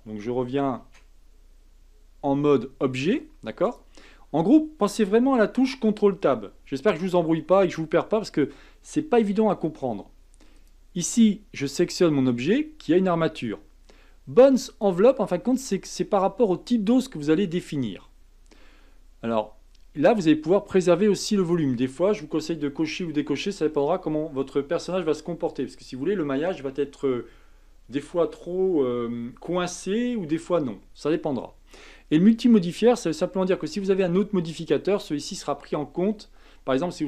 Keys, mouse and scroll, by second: 0.8 ctrl+Tab, 3.6 click, 10.5 click, 11.1 click, 14.7 click, 15.6 click, 20.0 click, 21.4 click.